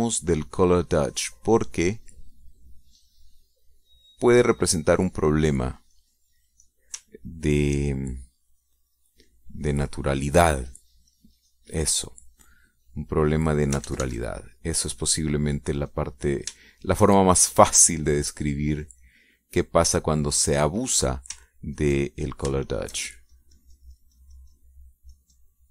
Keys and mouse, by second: 0.2 click, 0.9 middle click, 1.7 click, 2.0-3.1 drag, 3.2 middle click, 3.3 click, 4.3-5.9 drag, 6.4 click, 6.7 click, 7.5 middle click, 7.9 middle click, 9.1 ctrl+click, 9.6 ctrl+click, 10.0 ctrl+click, 10.4-12.5 ctrl+drag, 12.6 ctrl+click, 13.2 click, 14.4 click, 15.4 ctrl+z, 16.0 ctrl+click, 16.3 ctrl+click, 16.7-17.7 ctrl+drag, 18.1 shift+click, 19.1-21.0 drag, 21.4 click, 21.9 click, 23.3 ctrl+click, 24.1 shift+click, 24.6-25.7 shift+drag.